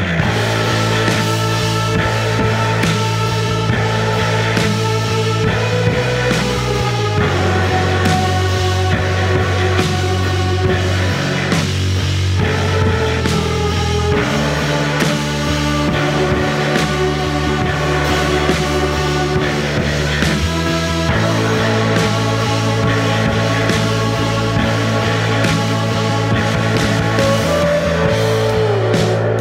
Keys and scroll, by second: 0.3 3, 1.2 ctrl+d, 1.3 Escape, 3.4 Delete, 3.9 ], 6.4-8.8 typing, 13.3 F1, 16.3 ], 16.5 Delete, 16.8 F1, 17.3 4, 20.3-21.3 typing, 24.0 Escape.